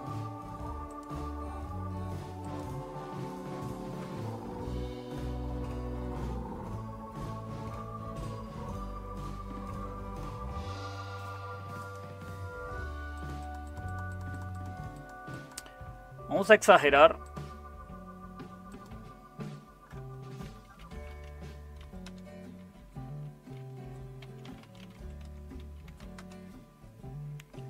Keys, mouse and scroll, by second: 20.5-21.8 typing, 22.0 Return, 24.2-26.3 typing.